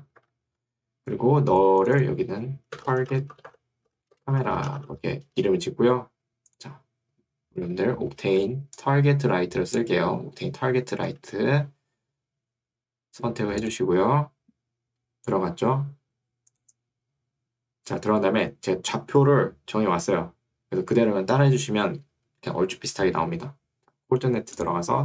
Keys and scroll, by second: 0.3 Escape, 3.0-5.4 typing, 11.2 Escape.